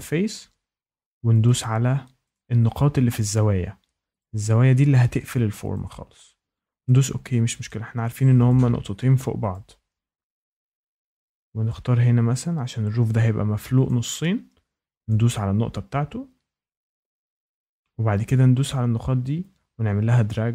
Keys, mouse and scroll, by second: 1.4 click, 2.3 click, 3.3 click, 4.1 click, 5.7 click, 6.8 click, 7.6 shift+middle click, 8.4 click, 9.5 click, 11.3-12.6 scroll, 13.8 click, 15.0 click, 15.5 scroll, 16.2-16.9 scroll, 17.1 Escape, 18.2 click.